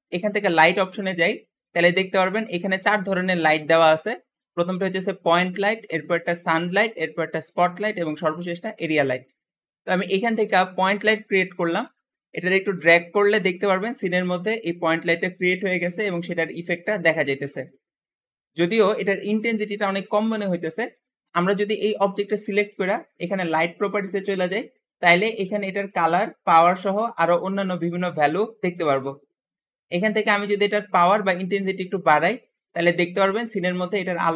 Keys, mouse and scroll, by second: 12.3 g, 14.6 click, 16.4 click, 23.0 click, 30.4-33.6 drag.